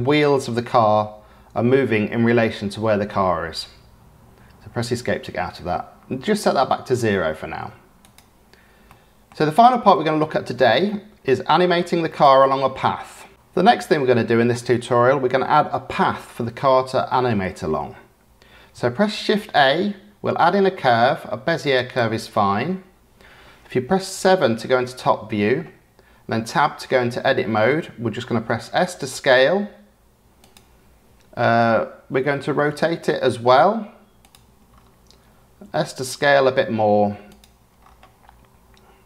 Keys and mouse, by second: 8.8-9.2 middle drag, 9.9-10.5 middle drag, 10.8-11.2 middle drag, 12.0-12.4 middle drag, 19.2 shift+a, 24.1 KP_7, 26.4 Tab, 28.7 s, 32.5 r, 37.2 s.